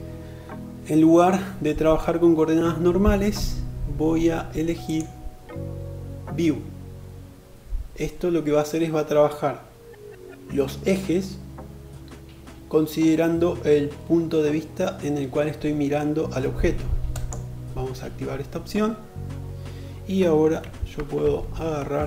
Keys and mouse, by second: 4.0-22.0 drag, 19.7 1, 20.6 alt+z.